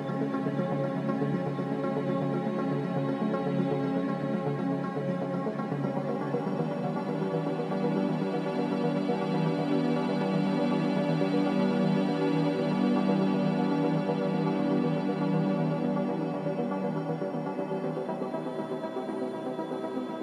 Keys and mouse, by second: 3.3 shift+middle click, 4.6-5.2 middle drag, 5.3 click, 7.2-7.8 drag, 9.2-9.8 shift+middle drag, 14.9 ctrl+r.